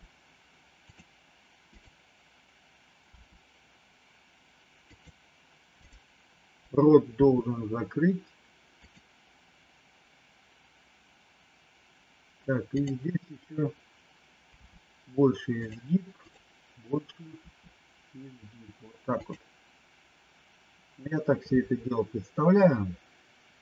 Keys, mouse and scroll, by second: 1.7 click, 3.1 r, 5.8 click, 7.2 r, 12.7 click, 14.6 r, 16.2 click, 17.4 r.